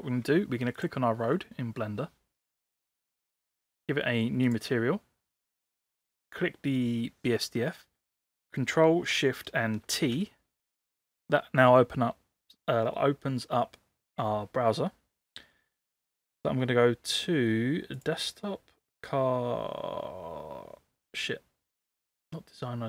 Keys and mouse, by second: 0.8 click, 3.7 click, 5.8 click, 9.9 ctrl+shift+t.